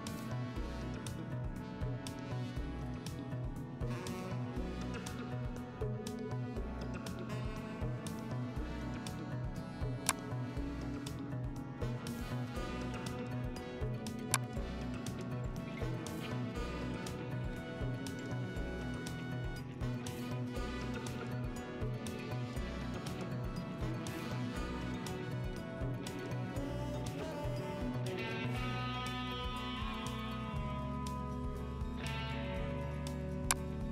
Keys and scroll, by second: 13.6 ctrl+t, 23.1 Return, 26.2 ctrl+t, 28.1 Right, 28.5 Right, 30.2 Right, 30.6 Left.